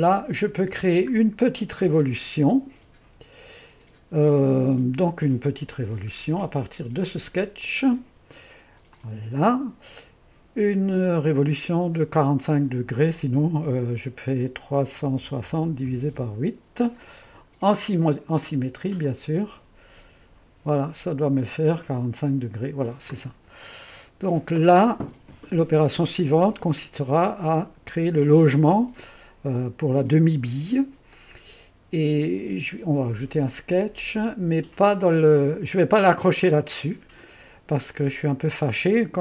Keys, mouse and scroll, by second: 0.0 click, 0.9-1.6 scroll down 1, 1.6-3.3 drag, 1.6-2.0 scroll down 1, 3.1 typing, 4.5 typing, 9.0 click, 11.2-14.8 drag, 14.8-16.2 typing, 19.1 click, 19.6 click, 20.2 Return, 21.5-29.2 drag, 31.2-34.7 drag, 36.1-39.2 drag.